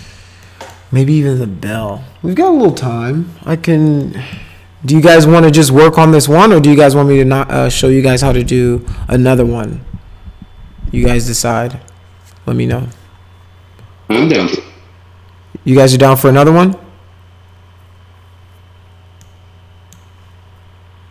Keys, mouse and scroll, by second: 0.4 middle click, 4.0 middle click, 19.2 middle click.